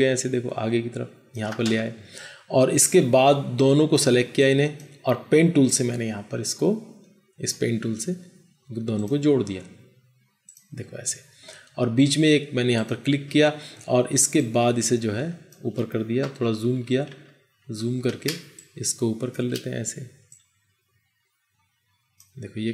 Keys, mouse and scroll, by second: 16.4 ctrl+=, 16.6 ctrl+=, 16.7 ctrl+=, 17.0 ctrl+=, 17.4 ctrl+=, 18.2 space.